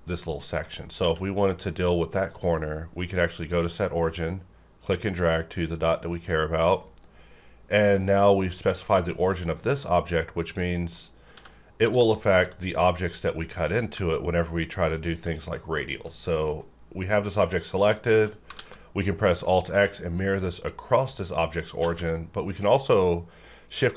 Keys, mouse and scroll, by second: 1.0 q, 2.3-6.6 drag, 6.6 middle click, 6.8-8.7 scroll up 1, 10.6 click, 10.6 click, 11.3 x, 11.9 x, 12.4 x, 13.9 g, 14.9 click, 15.8 shift+click, 16.1 scroll down 1, 16.4 middle click, 17.8 shift+click, 17.8 shift+click, 18.5 alt+x, 19.5 click, 21.8 q.